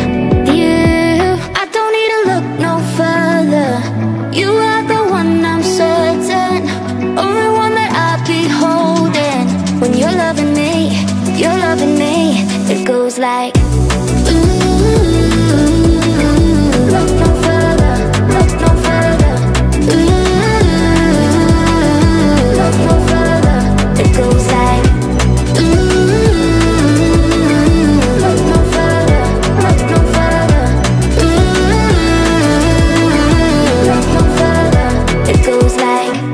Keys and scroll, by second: 4.9 space, 17.0 space, 27.6 ctrl+2, 31.6 Delete.